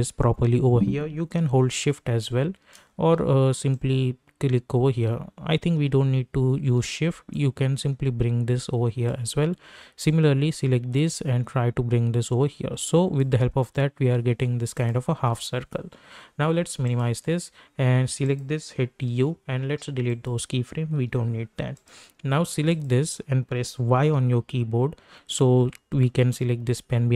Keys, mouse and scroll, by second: 3.8-7.3 drag, 7.3-13.7 drag, 13.7-14.7 scroll down 1, 14.7 click, 18.6-19.6 typing, 20.1 click, 24.0 y, 25.6-26.2 alt+scroll up 1.